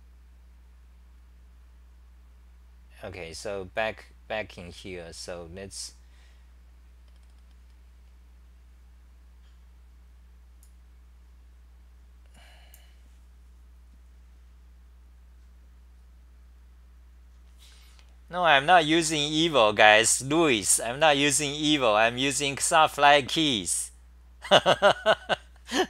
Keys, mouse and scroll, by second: 11.4-12.6 typing.